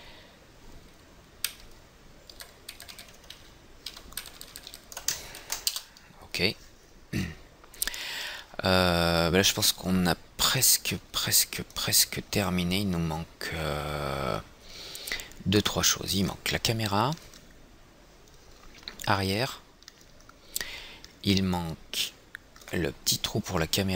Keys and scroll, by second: 3.9 shift+Right, 4.1 shift+Right, 4.5 shift+End, 4.8 shift+Left, 6.0 ctrl+c, 6.3 Return.